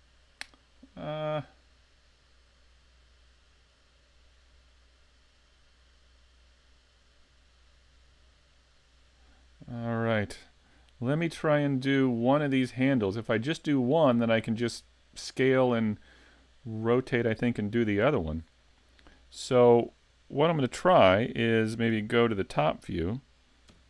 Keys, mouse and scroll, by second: 11.6-14.9 scroll up 3, 18.7 middle click, 21.9 KP_7, 23.7 KP_5.